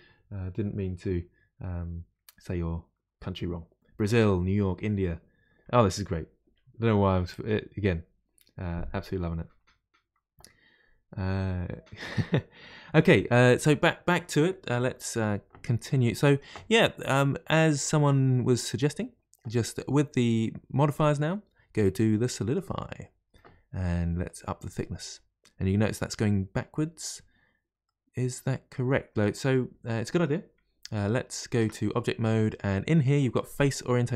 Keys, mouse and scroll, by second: 17.1-18.5 middle drag, 18.5-19.6 scroll up 2, 21.1-24.1 drag, 24.3-27.3 drag, 27.9-31.6 middle drag, 31.6 Tab, 32.5-34.1 drag.